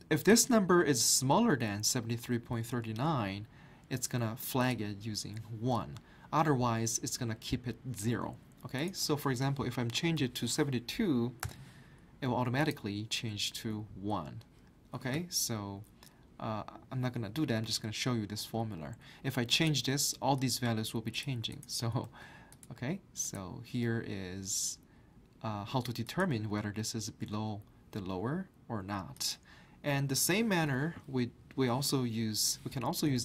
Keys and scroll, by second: 10.2 7, 10.5 2, 11.4 Return, 22.0 ctrl+z, 30.7 typing, 32.8-33.2 typing.